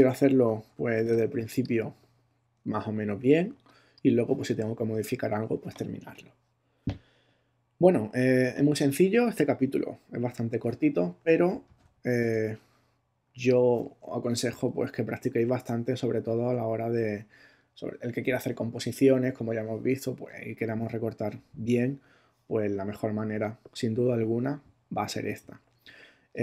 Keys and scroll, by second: 1.1 super+space, 2.0 space, 3.5 space, 11.7 super+-, 12.3 super+space, 13.2 space, 14.2 super+-.